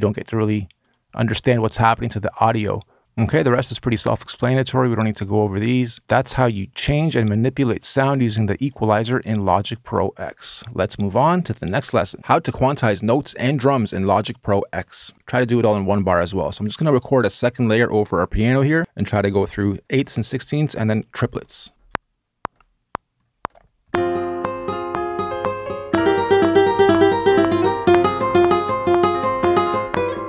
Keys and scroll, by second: 21.1 r, 21.7 BackSpace.